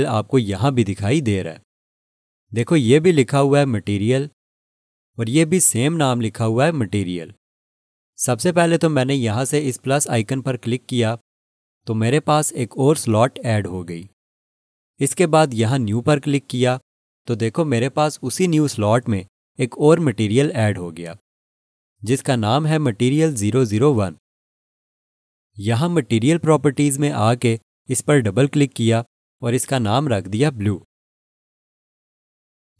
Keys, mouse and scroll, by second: 11.3 click, 17.2 click, 29.3 click, 29.4 double click, 30.9-32.2 typing.